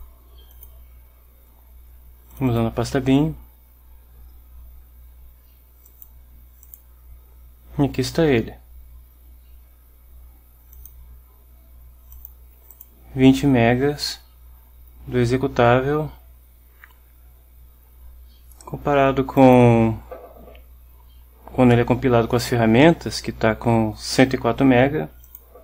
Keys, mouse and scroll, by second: 0.0 click, 2.5 click, 6.8 click, 10.8 click, 12.8-13.3 drag, 19.5 click.